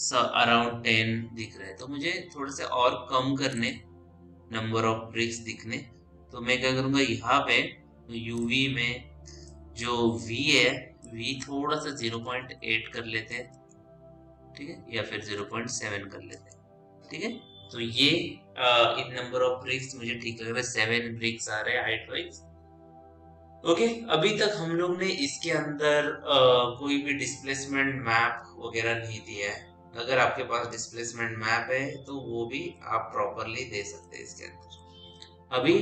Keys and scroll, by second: 12.5 KP_0, 12.8 KP_Decimal, 12.8 KP_8, 13.4 Return, 15.0 KP_0, 15.8 KP_Decimal, 15.9 KP_7, 16.2 Return.